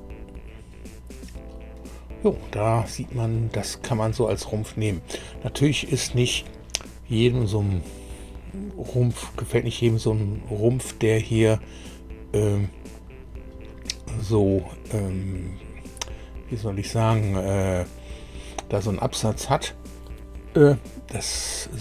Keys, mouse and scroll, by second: 3.0-4.2 drag, 4.2-7.5 middle drag, 9.2-12.7 middle drag, 18.5 middle click.